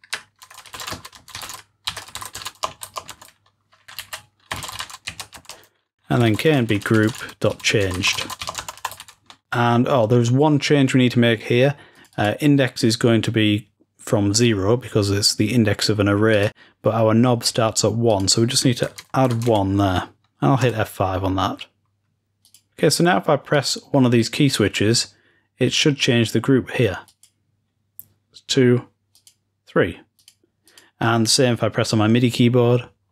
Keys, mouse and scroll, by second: 0.0-1.2 scroll down 2, 1.2-1.9 scroll down 1, 11.8-14.6 drag, 16.2-20.6 drag, 22.5 click, 23.6-26.0 drag, 27.1 click, 29.2-30.1 drag, 30.2 click, 30.7-32.1 drag.